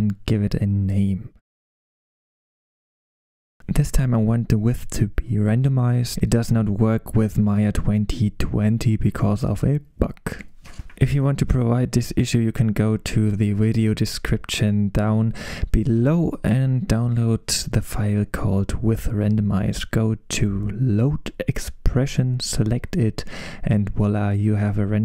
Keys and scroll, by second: 1.0-3.4 typing.